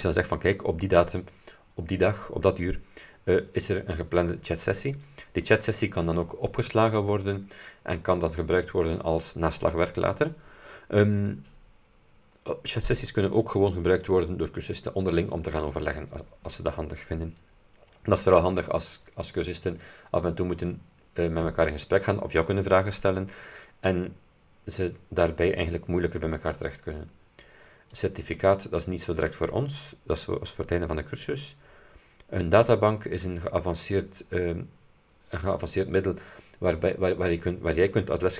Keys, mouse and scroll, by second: 28.1 click, 32.7 click.